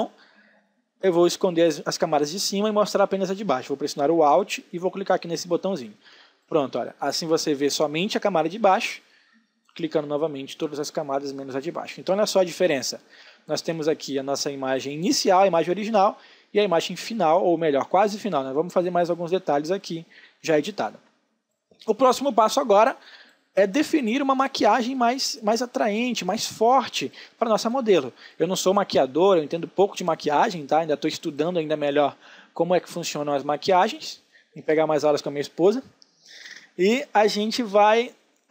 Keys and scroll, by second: 21.8 ctrl+space.